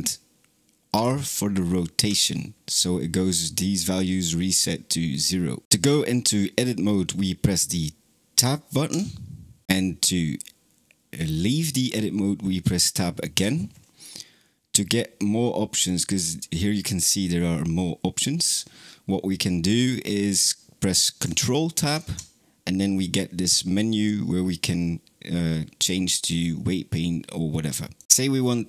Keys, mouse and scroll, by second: 1.9 alt+r, 8.8 Tab, 13.2 Tab, 15.6-18.8 drag, 21.6 ctrl+Tab.